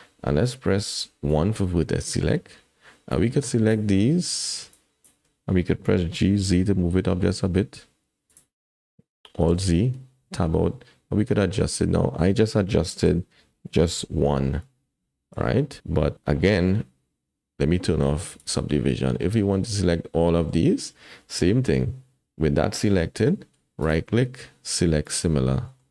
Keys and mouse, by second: 1.4 1, 3.3 click, 5.0 shift+click, 6.1 g, 9.5 alt+z, 10.2 Tab, 10.7 click, 13.1 ctrl+z, 14.0 KP_1, 15.4 ctrl+z, 18.4 click, 19.2 click, 20.4 click, 21.5 shift+click, 23.9-25.1 drag, 25.6 middle click.